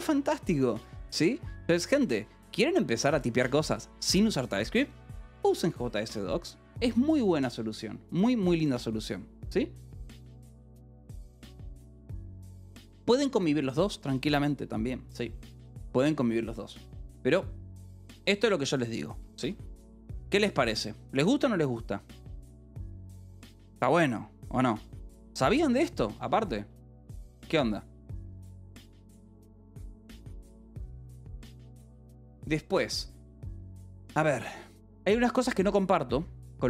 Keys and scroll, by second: 0.1 k, 1.4 j, 2.0 l, 19.3-21.1 typing.